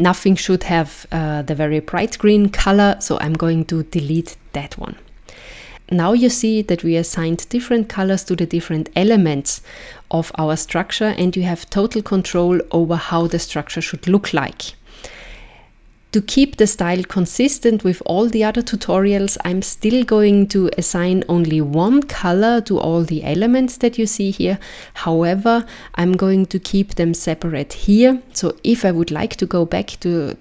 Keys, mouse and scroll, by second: 4.2 click, 11.2 click, 13.2-14.3 scroll down 2, 15.2-15.6 scroll up 2.